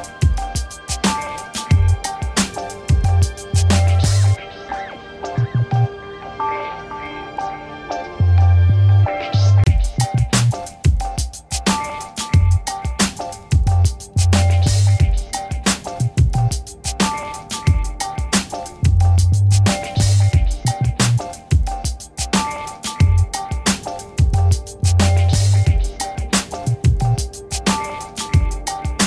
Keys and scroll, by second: 2.1 Return, 3.4 ctrl+t, 12.7 Return, 14.1 ctrl+t, 23.0 Return.